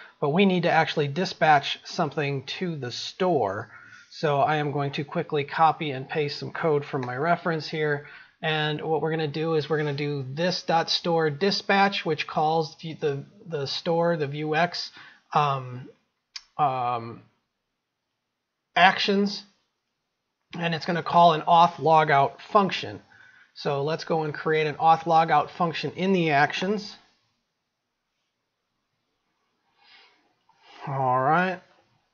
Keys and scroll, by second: 5.3 ctrl+c, 7.7 ctrl+v, 28.9 ctrl+c.